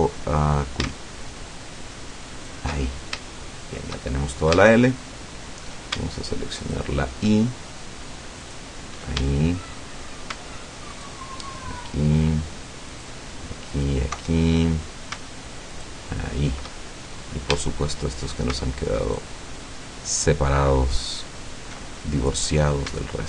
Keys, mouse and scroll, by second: 2.4 alt+shift+right click, 2.9 alt+shift+scroll down 2, 3.4 shift+middle click, 4.2-5.8 shift+middle drag, 6.6 alt+shift+right click, 8.4 alt+shift+right click, 9.4 alt+shift+middle click, 11.0 alt+shift+right click, 12.9 alt+shift+right click, 13.8 alt+shift+right click, 14.3 alt+shift+middle click, 15.8 alt+shift+right click, 17.2-17.5 scroll up 2, 17.6-18.2 shift+middle drag, 19.1 alt+shift+right click, 21.1 alt+shift+right click, 22.0 alt+shift+middle click.